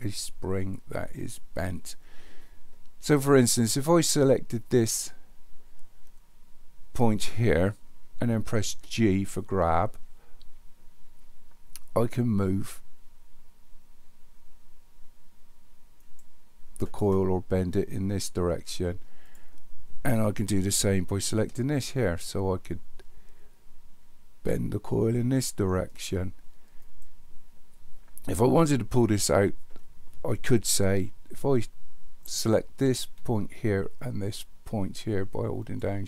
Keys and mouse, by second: 4.0 click, 8.7 g, 19.3 click, 21.3 g, 35.7 shift+click.